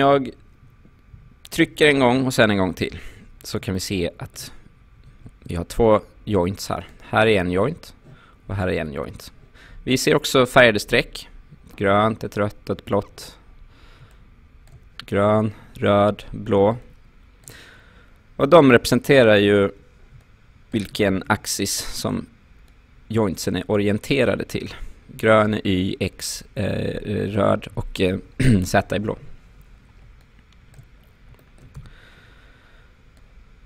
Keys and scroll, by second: 2.9 f, 5.0 q, 31.8 w.